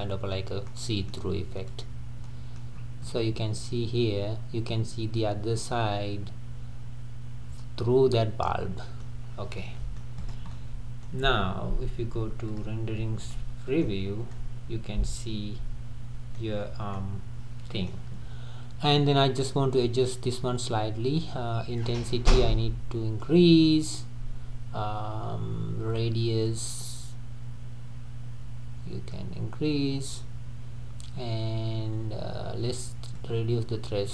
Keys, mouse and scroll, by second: 0.0 click, 0.7-1.3 middle drag, 1.3-1.7 scroll down 3, 1.7 drag, 2.3-2.8 middle drag, 2.8-3.1 scroll up 3, 3.1-6.1 middle drag, 9.3 scroll down 3, 9.6-10.2 middle drag, 10.2 click, 10.5-11.2 middle drag, 11.2-11.9 scroll up 2, 11.9-12.5 scroll up 1, 12.5 drag, 13.0-13.3 scroll down 2, 13.3-14.0 middle drag, 14.0-14.4 scroll down 2, 14.4-16.6 middle drag, 16.6-17.0 scroll up 2, 17.0-22.0 middle drag, 22.0-34.1 drag.